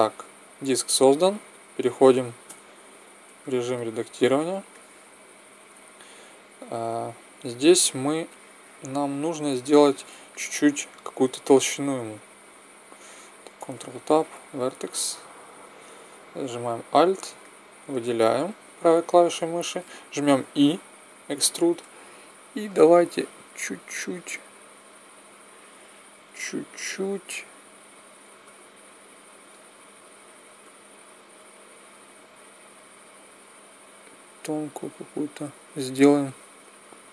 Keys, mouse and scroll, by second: 2.4 Tab, 8.0 middle click, 13.4 right click, 13.5 ctrl+Tab, 17.1-18.4 right drag, 18.4 click, 20.3 e, 22.6-24.5 drag.